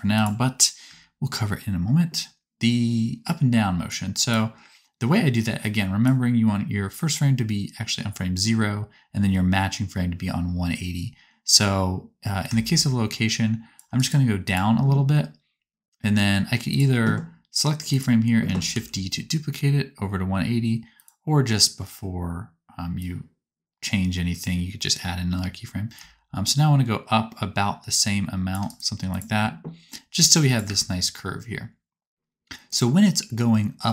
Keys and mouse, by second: 0.0 click, 0.0 middle click, 0.0 right click, 0.8 space, 2.7-3.8 drag, 14.0-16.7 drag, 14.0-16.7 middle drag, 14.0-16.7 right drag, 17.8 click, 17.8 middle click, 17.8 right click, 18.6 shift+d, 20.1-22.9 right drag, 30.6 space.